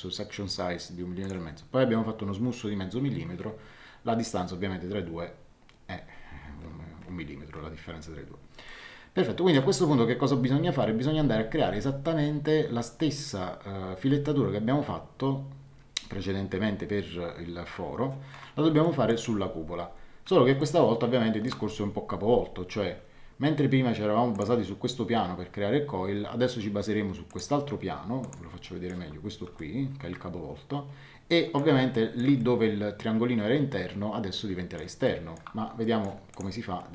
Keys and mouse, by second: 1.2 click, 8.6 shift+middle click, 18.8 middle click, 20.5 middle click, 24.3 click, 27.2 click, 28.6 shift+middle click, 29.5 shift+middle click, 31.9 middle click, 32.3 shift+middle click, 35.0 shift+middle click, 36.3 click.